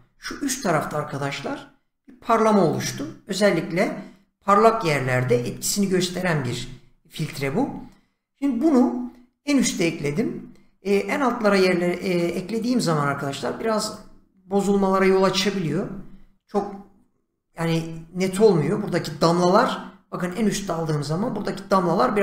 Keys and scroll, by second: 0.1 <, 7.3 Escape.